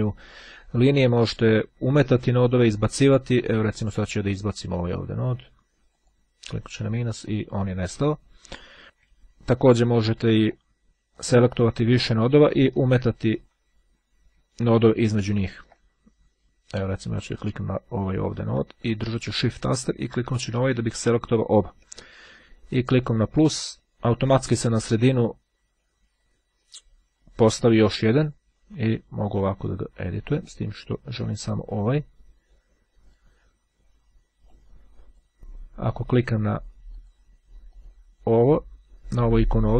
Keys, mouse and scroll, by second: 4.6 click, 5.7 click, 7.9-8.4 scroll down 2, 8.4-8.8 scroll up 2, 8.8-9.3 scroll down 3, 10.1-10.6 ctrl+shift+scroll down 3, 10.8-11.2 ctrl+scroll up 3, 11.2-11.7 scroll down 3, 11.8-12.6 shift+scroll up 2, 12.6-13.0 scroll down 1, 13.0-13.9 shift+scroll up 1, 14.5-15.1 ctrl+scroll up 1, 15.3-15.9 ctrl+scroll down 1, 17.5 click, 20.4 shift+click, 23.0 click, 28.2-30.6 drag, 31.8-33.7 drag, 34.5 click, 36.9 click, 37.8 click.